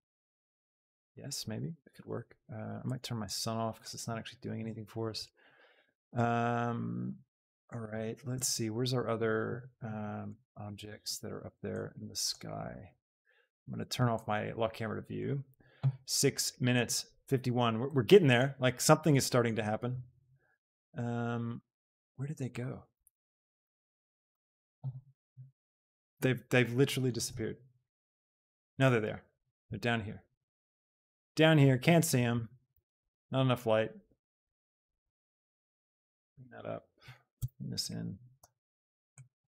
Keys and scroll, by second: 22.9 b, 35.0 g, 35.4 z, 38.3 g, 38.7 z.